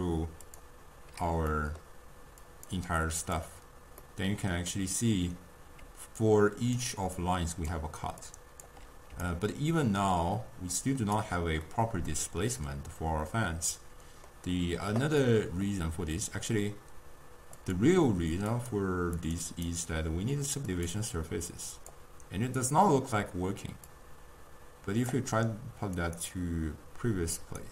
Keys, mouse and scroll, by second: 1.5-2.5 middle drag, 2.5 click, 3.2 click, 4.0-5.9 middle drag, 5.9 d, 6.2 click, 6.8-8.1 d, 7.2 click, 7.7 d, 8.3 click, 8.6-9.2 d, 9.3-11.2 right drag, 11.2 d, 11.7-14.7 middle drag, 15.2-17.6 middle drag, 17.6 click, 18.6 click, 19.2 click, 19.6-25.1 drag, 26.1-27.7 drag.